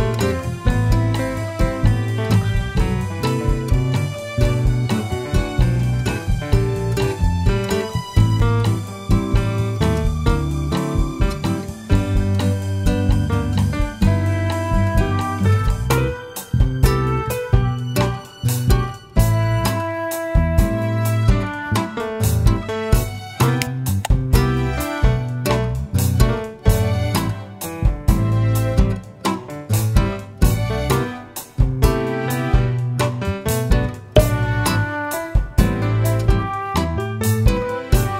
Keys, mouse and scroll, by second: 0.8 click, 1.2-3.8 middle drag, 3.5 Tab, 3.8 click, 4.8 click, 5.8-12.0 drag, 12.5 click, 12.8 scroll down 1, 13.3-14.0 middle drag, 14.0 click, 14.5 Tab, 15.8 shift+middle click, 17.1 scroll up 1, 17.5-19.2 middle drag, 17.8 Tab, 19.2 2, 20.7 click, 21.7 ctrl+b, 25.7 Escape, 26.2 Tab, 27.1 ctrl+a, 31.8 Tab, 32.8 ctrl+b, 36.8 click.